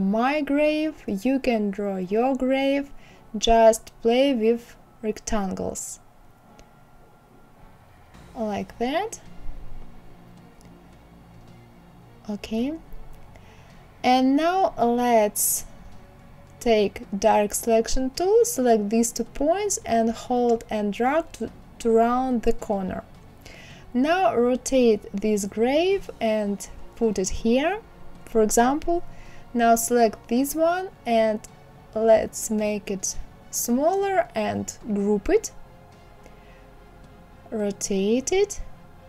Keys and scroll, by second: 2.8 Down.